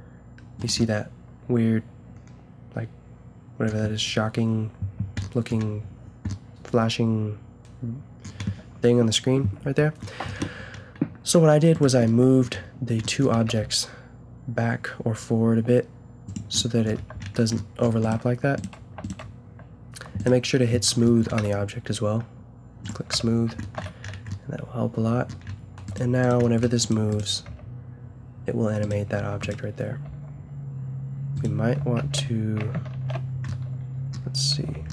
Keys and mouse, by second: 5.3-8.0 middle drag, 9.7 middle click, 13.3 g, 16.9 a, 21.4 t, 22.8 click, 23.1 t, 23.9 a, 27.5 g, 29.2 s, 30.0 s, 32.0 alt+g, 32.9 ctrl+z, 34.6 alt+r.